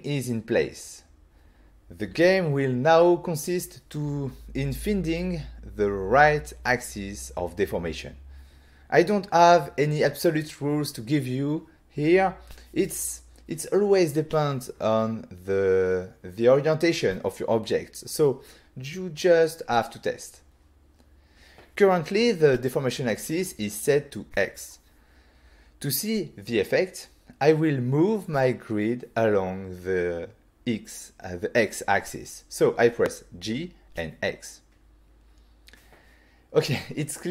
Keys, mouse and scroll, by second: 0.0 shift+middle click, 20.8 scroll down 1, 34.0 g, 34.9 x.